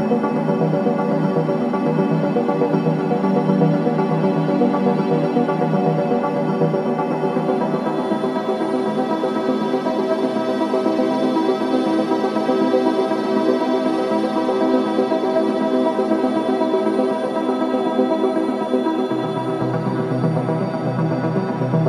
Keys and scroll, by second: 10.8 4, 20.3 0, 20.4 Return, 20.6 0, 20.7 Return, 20.9 0, 21.3 Return.